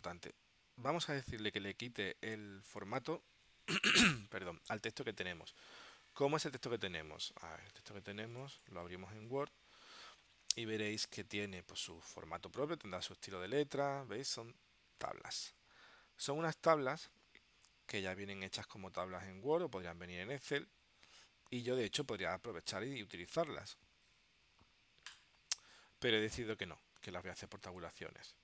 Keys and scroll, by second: 6.5 super+Tab.